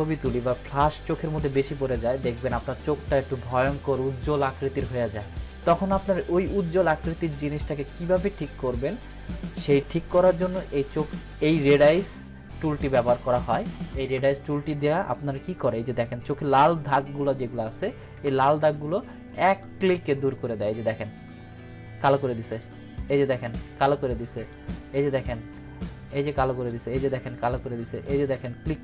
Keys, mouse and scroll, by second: 18.2 ctrl+=, 21.0 click.